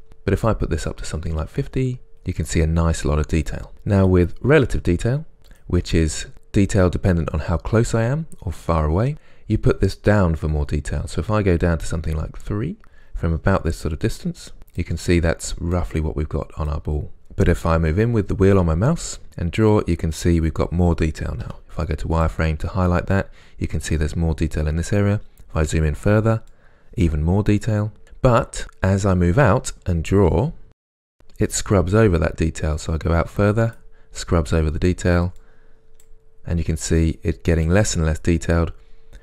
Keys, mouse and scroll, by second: 7.2 scroll up 1, 8.3 scroll down 1, 21.5 z, 25.3 scroll up 1, 26.6-28.6 drag, 28.0-28.6 scroll down 2, 28.6-29.0 scroll up 1, 29.0-29.9 scroll down 1, 30.2 click, 31.8 scroll down 1, 32.8-36.6 drag, 34.7-35.5 scroll down 2, 36.4 scroll down 2, 37.1 click.